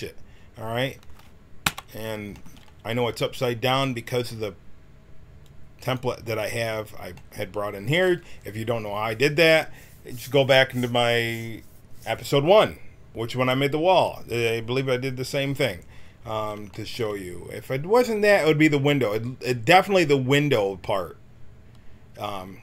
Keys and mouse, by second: 1.6 n, 5.4-9.0 drag, 9.0-22.3 middle drag.